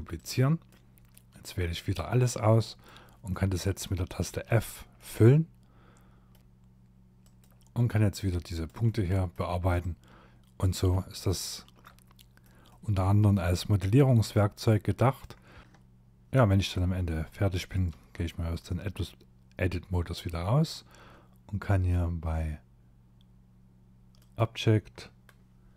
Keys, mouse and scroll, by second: 0.1 middle click, 1.0 click, 2.3 middle click, 3.5 f, 4.0 middle click, 6.4 click, 7.1 click, 7.8 middle click, 8.8 click, 9.9 shift+middle click, 10.8 middle click, 11.7 middle click, 13.6 click, 14.6 shift+middle click, 15.2 middle click, 15.6 Tab, 15.7 click, 16.9 Tab, 23.2 click.